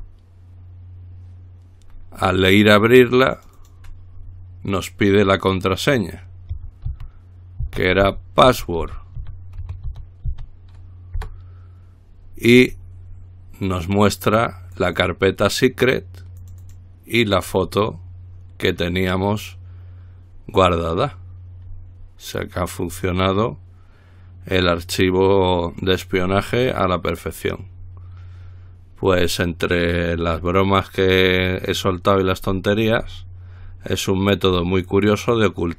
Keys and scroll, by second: 0.0-0.1 typing, 2.6 typing, 6.8-11.4 typing.